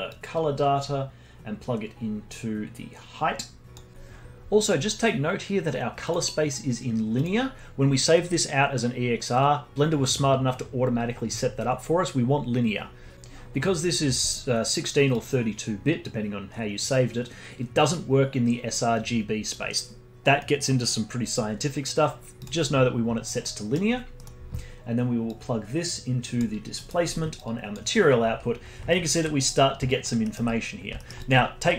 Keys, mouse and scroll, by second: 0.1 click, 6.0-9.0 drag, 15.1-18.2 drag, 23.4-24.0 middle drag, 24.0 scroll down 1, 24.1-25.3 middle drag, 25.3 drag, 27.0-27.4 middle drag, 27.4 click, 28.5-28.9 scroll down 1, 28.9-29.3 alt+drag, 29.3-29.8 scroll up 2, 29.8 alt+click, 30.2-30.6 alt+middle drag, 30.6-30.9 scroll up 1, 30.9 alt+middle click, 31.1-31.7 alt+drag.